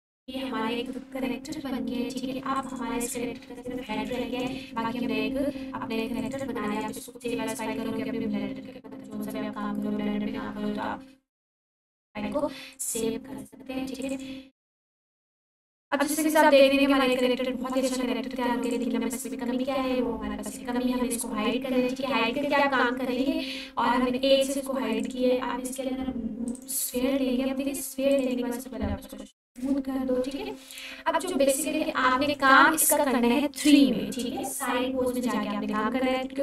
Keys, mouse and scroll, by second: 2.6 click, 3.6-4.8 typing, 6.2 click, 12.7 click, 16.6 alt+q, 17.1-17.7 ctrl+alt+drag, 19.6 h, 22.6 shift+a, 24.9 click, 25.7-26.5 scroll up 1, 26.5 right click, 28.1 click, 28.6-30.3 scroll down 1, 30.3 3, 32.1 shift+d, 32.8 y, 33.6 click, 34.2 s, 36.0 click.